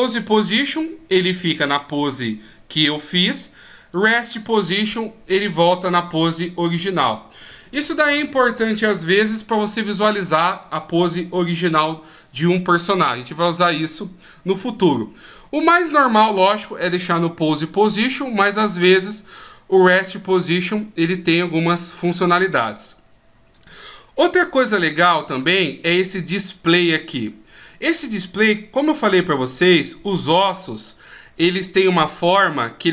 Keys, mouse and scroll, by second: 3.9 click, 16.3 click.